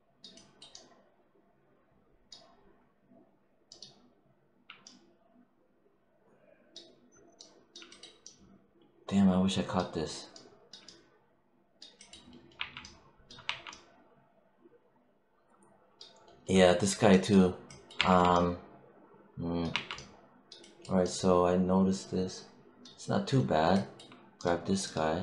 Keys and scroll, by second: 12.4 3, 13.3 1, 17.8 3, 19.6 1.